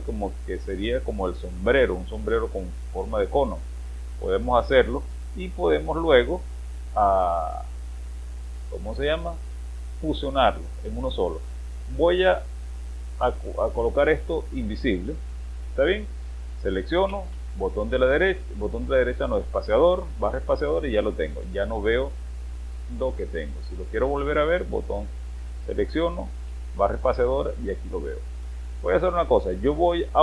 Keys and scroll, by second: 17.1 space, 24.3 space, 28.2 space.